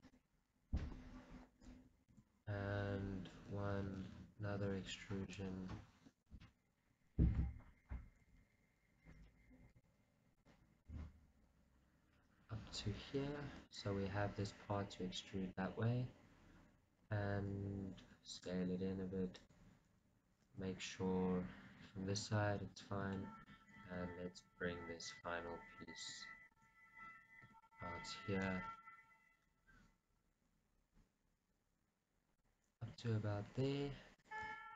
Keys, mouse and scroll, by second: 0.2 click, 1.0 KP_1, 2.3 shift+z, 4.2 e, 5.5 click, 7.7 ctrl+z, 8.5 g, 9.4 right click, 10.1 e, 10.8 right click, 10.9 g, 14.0 click, 18.5 s, 19.6 click, 23.3-25.4 shift+middle drag, 24.2 e, 25.4 click, 26.1 click, 26.8 ctrl+z, 28.1 right click, 28.8 g, 32.7 click, 33.0 r, 34.4 click.